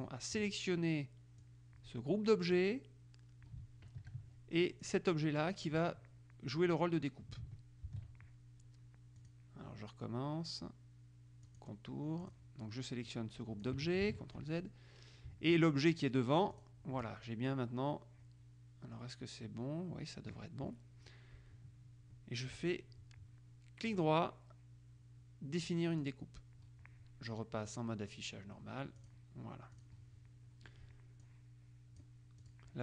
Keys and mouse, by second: 1.6-3.2 drag, 4.2 ctrl+KP_5, 5.0 click, 8.0 ctrl+z, 9.3 click, 11.6 click, 12.4 click, 13.2-14.3 drag, 14.2 ctrl+z, 16.7 shift+click, 24.0 right click, 26.2 click, 27.9 click, 29.2 click, 29.9 click, 31.4-32.8 drag.